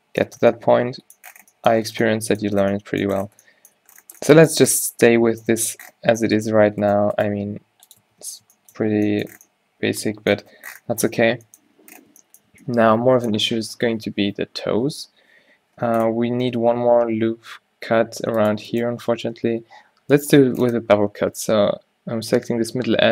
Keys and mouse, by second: 0.4 Tab, 3.5 a, 3.9 a, 6.5 Tab, 6.6 right click, 7.3 g, 8.1 Tab, 11.1 Tab, 16.9 ctrl+r, 19.6 ctrl+z, 21.3 ctrl+b.